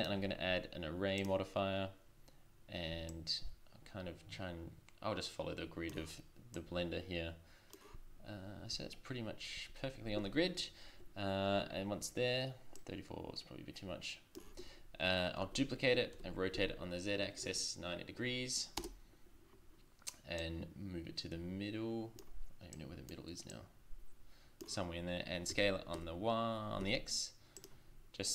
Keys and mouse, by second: 6.5-9.4 drag, 12.7 click, 15.4 shift+d, 20.4-22.2 drag, 22.7-24.0 drag, 25.9 s.